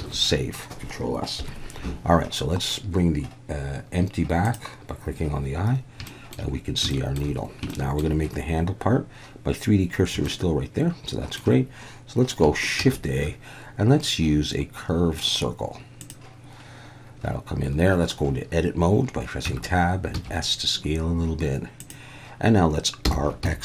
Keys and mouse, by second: 0.0 ctrl+s, 1.4 KP_1, 4.5 click, 6.1 shift+middle drag, 6.9 shift+middle drag, 7.7-8.0 shift+middle drag, 10.2-11.4 shift+middle drag, 12.8 shift+a, 19.5 Tab, 20.1 s, 21.8 click, 23.0 r, 23.4 x.